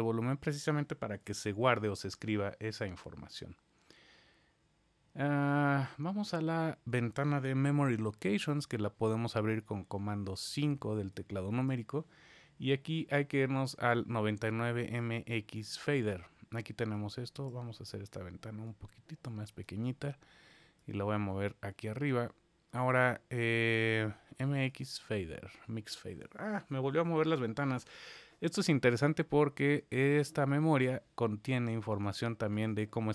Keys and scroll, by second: 1.1 super+4, 7.8 super+5.